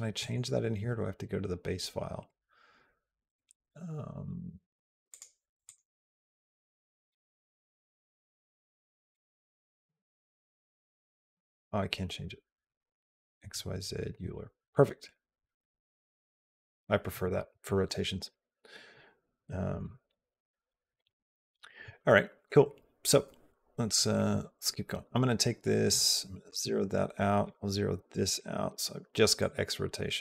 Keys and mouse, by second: 0.0 click, 4.9 click, 6.5 click, 7.1 click, 10.0 click, 11.4 click, 25.7 click, 27.2 click, 29.3 click.